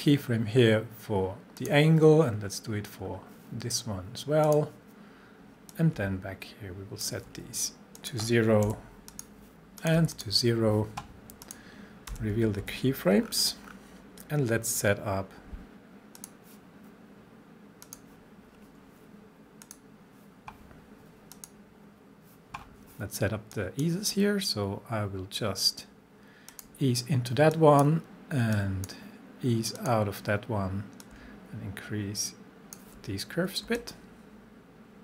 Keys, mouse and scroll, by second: 0.2 scroll down 1, 1.6 click, 2.2 scroll down 1, 3.0 scroll up 1, 4.5-8.0 drag, 8.7 0, 9.1 click, 10.0 0, 10.1 click, 12.1 u, 12.6 u, 13.3-15.5 scroll down 1, 16.2 click, 22.6-23.3 scroll down 1, 23.5 click, 26.5-29.2 drag, 33.8-35.0 shift+drag.